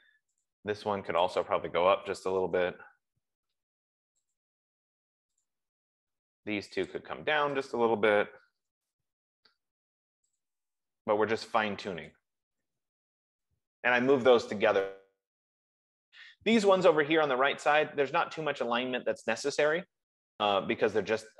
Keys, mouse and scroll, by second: 0.9 click, 1.6 click, 2.2-3.4 typing, 4.7 click, 6.2 click, 7.2 click, 8.1 click, 8.9 typing, 10.8 click, 12.5 click, 13.5 Escape, 14.2 typing.